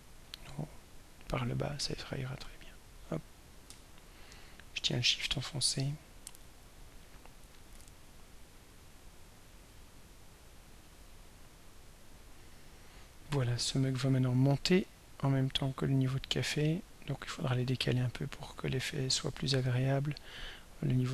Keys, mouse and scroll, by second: 0.4-1.0 scroll down 4, 2.6-5.8 drag, 7.8 right click, 9.8 click, 11.4-12.2 scroll up 1, 12.7-13.1 scroll down 1, 14.5-21.1 drag.